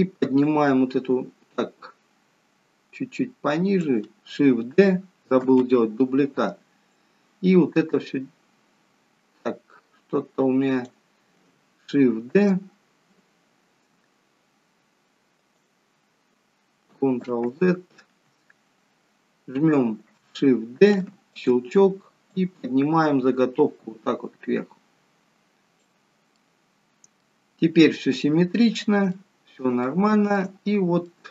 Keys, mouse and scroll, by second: 0.4 click, 0.4-1.4 scroll down 3, 6.6 ctrl+d, 6.9 click, 15.1 shift+d, 17.3 ctrl+z, 20.9 shift+d, 22.7 click, 26.3 middle click, 28.4 middle click, 29.2 middle click, 29.2-29.9 scroll up 1, 29.9 shift+middle click, 30.5 shift+middle click, 31.0 middle click, 31.0-31.3 scroll up 4.